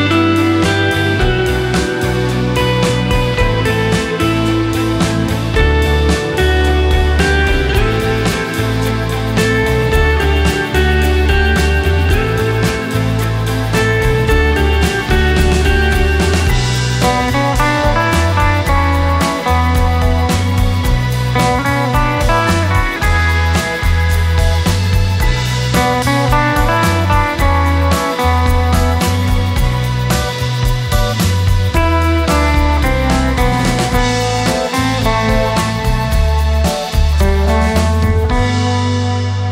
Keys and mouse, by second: 0.8-1.9 shift+drag, 10.2 click, 13.2-18.6 drag, 21.8-26.8 drag, 29.3-31.7 drag, 31.9 Tab, 33.9 KP_7, 35.2-35.8 shift+middle drag, 36.7 shift+a.